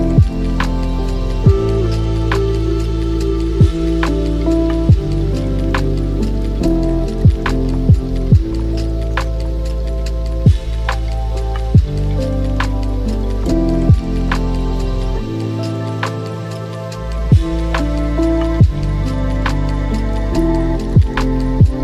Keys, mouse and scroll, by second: 1.7 click, 2.4-3.7 middle drag, 3.7-8.9 drag, 9.7-10.0 scroll down 3, 11.0 click, 12.2 click, 12.9-16.9 drag, 17.2 h, 17.7-18.1 scroll down 2, 18.1-18.6 middle drag, 18.6-19.0 scroll down 2, 19.0-20.2 middle drag, 20.2 click, 21.2-21.8 drag.